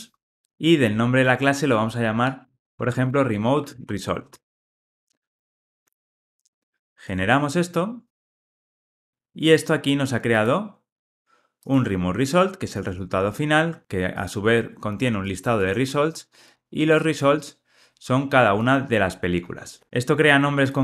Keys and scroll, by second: 0.5 super+v.